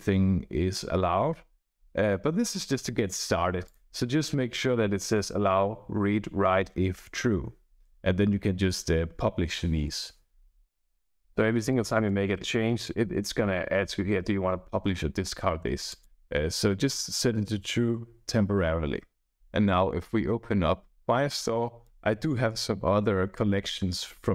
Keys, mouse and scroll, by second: 3.6 click, 11.6 click, 13.5-14.7 typing, 15.8 click, 19.3-21.9 drag.